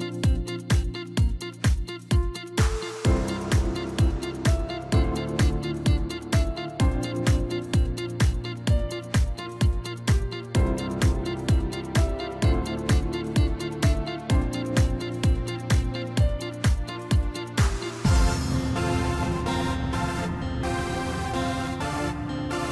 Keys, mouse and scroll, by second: 0.3-0.9 middle drag, 0.9 scroll up 1, 3.7-5.2 drag, 5.2-6.1 middle drag, 6.1-7.3 scroll up 1, 7.3-7.9 drag, 7.9-8.2 scroll down 1, 8.2-9.0 middle drag, 9.0-10.1 scroll up 9, 10.2 click, 11.7 click, 13.2-14.6 drag, 14.6 scroll down 2, 14.9-16.4 middle drag, 16.4 scroll up 1, 17.3 click, 20.3 Tab, 21.5 a.